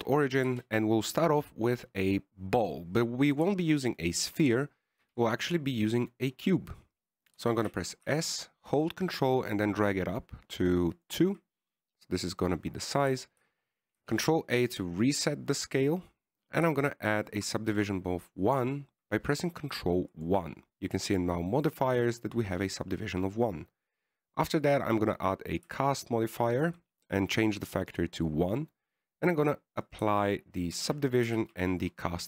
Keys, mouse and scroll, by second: 1.8 KP_1, 6.3 shift+a, 7.7-8.3 scroll up 1, 8.3-8.7 scroll down 1, 8.7-9.1 scroll down 2, 8.7 s, 13.0 middle click, 14.5 KP_1, 15.3 ctrl+a, 19.0 ctrl+1, 20.8 click, 24.3-25.2 scroll up 1, 25.2 click, 26.9 click, 31.2 click, 32.1 ctrl+a.